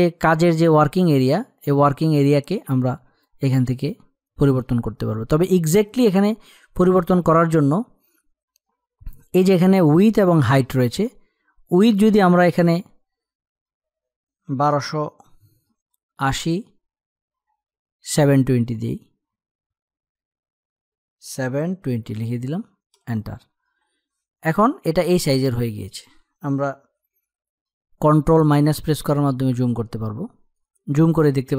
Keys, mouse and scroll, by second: 2.5 space, 2.9 click, 11.6-17.6 drag, 18.4-22.6 drag, 25.0 space, 25.2 click, 25.5 space, 28.0-29.2 typing, 30.5 space, 30.8 click, 31.0 space.